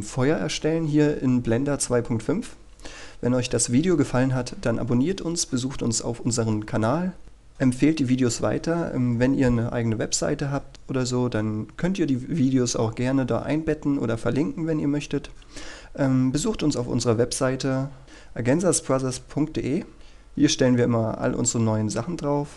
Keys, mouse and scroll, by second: 18.0 click, 20.5-22.5 scroll down 1.